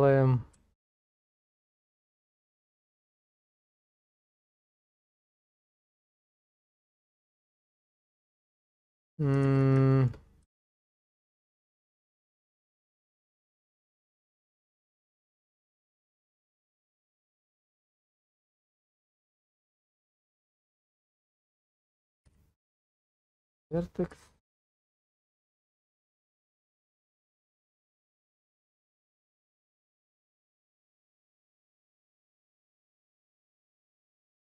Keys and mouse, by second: 0.0-1.1 middle drag, 1.7-5.2 middle drag, 5.7 shift+middle click, 8.1 middle click, 9.6 shift+z, 9.9 shift+middle click, 10.3 alt+middle click, 11.5 shift+middle click, 12.1 middle click, 13.6 KP_0, 15.6 shift+middle click, 17.3-20.2 drag, 24.2 shift+middle click, 25.7-30.1 drag.